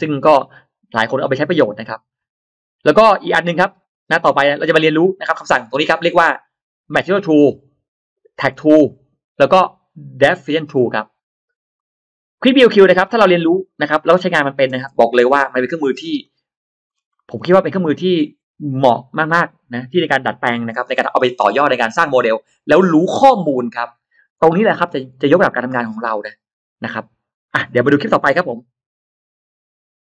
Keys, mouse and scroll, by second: 11.6-12.6 drag, 12.8-13.4 scroll down 1, 13.3 middle click, 14.1-14.4 scroll down 1, 14.7 click, 14.7 space, 15.0-15.8 scroll up 2, 16.1 click, 16.7-17.1 scroll down 1, 17.0 middle click, 17.4-17.7 scroll up 1.